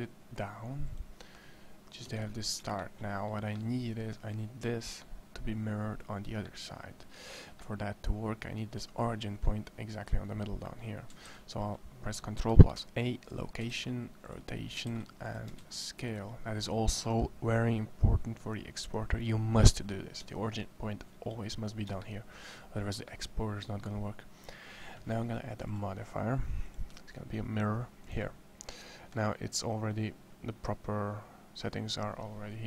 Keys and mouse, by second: 1.8 Tab, 9.1 middle click, 11.0 ctrl+a, 13.6 ctrl+a, 15.1 ctrl+a, 15.4 ctrl+a.